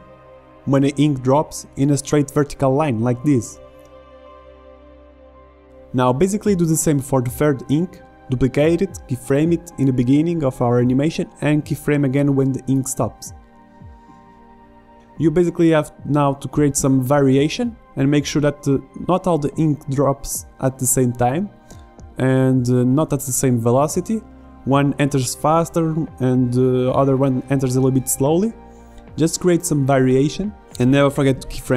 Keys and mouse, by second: 0.1-1.8 drag, 1.9 i, 4.5 click, 6.1 shift+d, 7.5 i, 7.7 click, 8.7 i, 8.9 click, 9.9 click, 11.2 click, 11.4 i, 11.7 g, 12.0 click, 12.1 alt+a, 12.4 alt+a, 12.5 click, 12.9 click, 14.1 click, 14.5 i, 15.9 click, 16.7 i, 16.9 click, 17.4 click, 18.4 click, 18.6 i, 18.8 click, 19.0 s, 19.3 right click, 19.7 s, 20.6 click, 21.0 middle click, 21.0 click, 21.8 middle click, 22.1 g, 22.7 click, 23.1 i, 23.5 click, 24.0 ctrl+z, 24.1 ctrl+z, 24.3 click, 25.0 i, 25.3 click, 25.7 i, 26.4 click, 26.7 click, 27.1 i, 28.2-29.2 drag, 29.1 i, 29.6-31.1 drag, 29.9 i, 30.5 i.